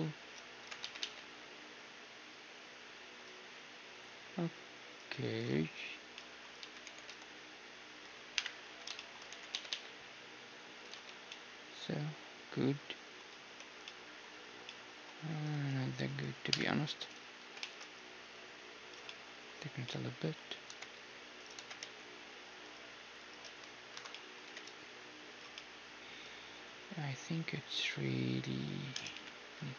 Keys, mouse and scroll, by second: 0.6 g, 5.6-8.3 middle drag, 6.6 z, 6.8 e, 8.3 KP_1, 8.7 z, 8.9-10.9 middle drag, 9.3 e, 10.9 z, 11.1-13.3 middle drag, 13.6 Tab, 14.2-16.5 middle drag, 15.5 s, 16.5 KP_1, 16.9 s, 19.7 middle click, 20.6 g, 21.6 g, 23.2-25.1 right drag, 23.4 Tab, 24.1-25.1 drag, 24.4 g, 25.1-27.6 middle drag, 29.1 KP_3.